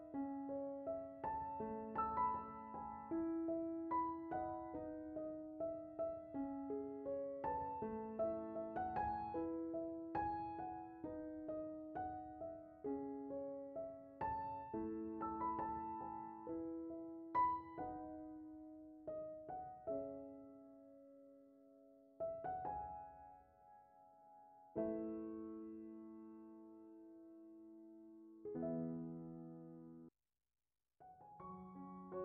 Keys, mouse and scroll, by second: 3.0 middle drag, 3.4 drag, 3.4 shift+d, 4.7 shift+d, 6.0 scroll, 6.6-8.3 right drag, 9.0 BackSpace, 9.2 BackSpace, 11.4 scroll, 11.8 middle click, 13.7 scroll down 1, 13.8 middle click, 15.4 click, 17.7 click, 18.8 click, 19.7 shift+d, 21.4 click, 23.0 right click, 26.2 click, 27.3 click, 28.6-29.5 middle drag, 29.5 click, 32.0 click.